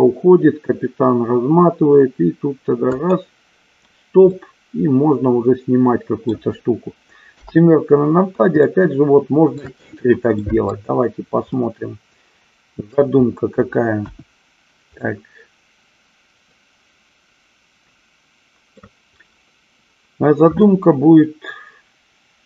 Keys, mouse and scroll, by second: 3.1 click, 4.5-6.5 middle drag, 7.5 KP_7, 8.9-9.8 shift+middle drag, 10.6 middle drag, 11.8-13.1 middle drag, 14.2 KP_1, 15.2-19.1 middle drag.